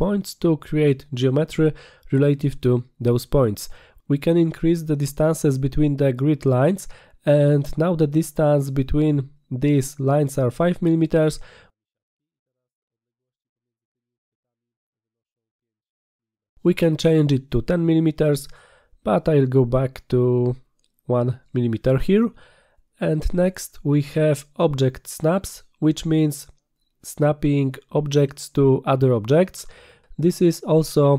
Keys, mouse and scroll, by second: 2.1 middle click, 2.3-2.8 middle drag, 10.3 click, 17.2 click, 19.3 click, 20.1 click, 20.6 click, 23.0 click, 28.6 click.